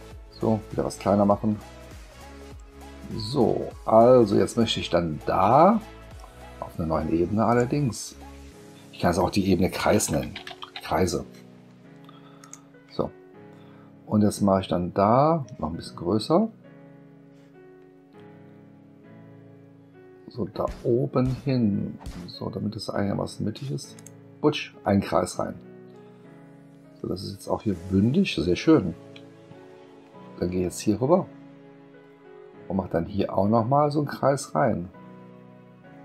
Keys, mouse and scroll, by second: 1.2 middle click, 7.5 click, 9.7-11.1 typing, 12.4 click, 16.8 middle click, 16.8-17.3 scroll up 1, 23.9 click, 29.3 space.